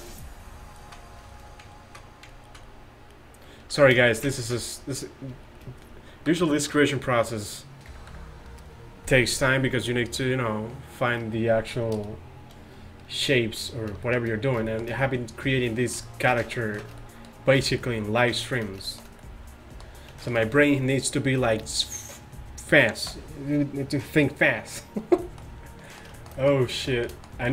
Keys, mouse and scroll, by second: 0.9 middle click, 3.8 a, 6.3 KP_5, 7.9 KP_1, 8.2 KP_5, 13.6-14.5 middle drag.